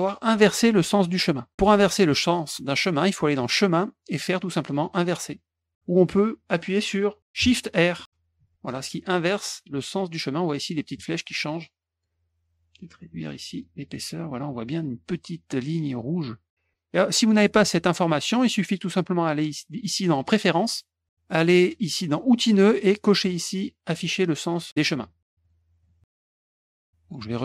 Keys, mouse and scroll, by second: 3.3 click, 8.0 shift+r, 9.5 shift+r, 11.0 shift+r, 12.9 right click, 13.5 click, 14.2 middle click, 14.2 scroll up 1, 20.2 click, 23.8 click, 25.4 click, 25.8 click, 26.4 middle click, 26.8 click.